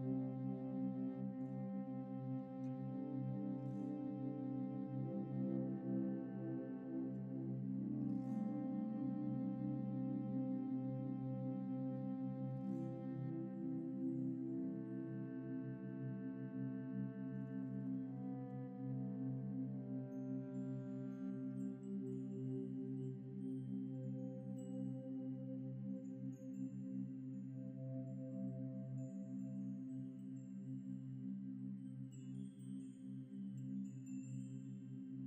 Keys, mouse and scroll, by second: 2.0 scroll up 1, 5.0 typing, 7.5 typing, 9.7 typing, 12.3 scroll up 1, 12.5 shift+middle click, 12.9 scroll up 1, 13.3 typing, 16.3 middle click, 17.3 shift+middle click, 17.8 middle click, 21.6 right click, 27.1 scroll down 1, 27.7 typing, 28.7-29.5 typing, 30.9 typing, 31.2 Return.